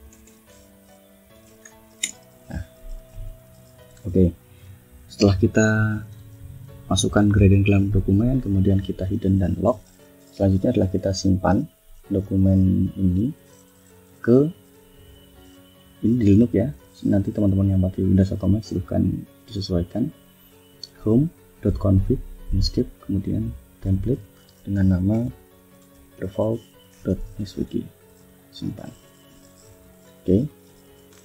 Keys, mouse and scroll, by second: 0.0-1.8 typing, 1.9 Return, 2.8 click, 3.2 click, 3.6 click, 4.3 click, 7.8 click, 9.7 click, 10.7 ctrl+shift+s, 23.8 click, 24.5-26.6 typing, 28.2 click, 29.4 click, 30.6 click.